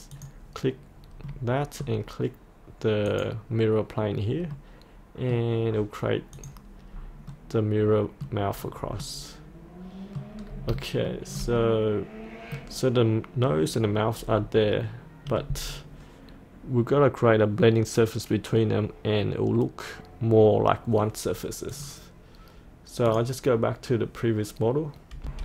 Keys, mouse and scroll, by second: 0.2 click, 1.3 middle click, 3.1 click, 4.6-5.7 middle drag, 6.4 click, 6.9-7.4 scroll up 1, 7.4 middle click, 8.6-9.0 scroll down 1, 9.0 middle click, 10.4-10.7 scroll down 1, 11.1 shift+middle click, 11.6-12.8 middle drag, 14.8 middle click, 15.7-21.8 scroll down 1, 21.8 click, 25.3 F8.